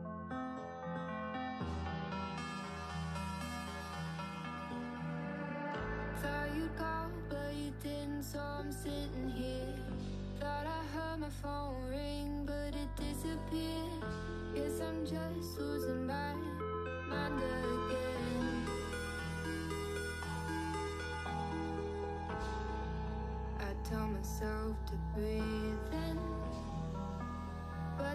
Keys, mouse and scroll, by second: 0.5 scroll down 4, 0.7-1.3 middle drag, 1.3 shift+a, 2.5 middle click, 2.8 KP_7, 3.1 Tab, 3.5 alt+z, 4.0 s, 8.2 s, 11.1-12.2 middle drag, 12.2 scroll up 1, 12.4 alt+z, 12.5 shift+middle click, 12.7 scroll up 2, 13.0 shift+middle click, 13.3 s, 15.0 s, 16.2 middle click, 16.5-16.8 scroll up 4, 16.8-17.1 scroll down 2, 17.1 shift+middle drag, 17.3 Tab, 17.6 scroll down 4, 17.9 click, 18.1-19.5 middle drag, 19.6 scroll down 1, 19.9-21.9 middle drag, 22.3-25.8 middle drag, 26.2-26.8 shift+middle drag, 26.8 Tab, 27.0 Tab, 27.2 shift+a.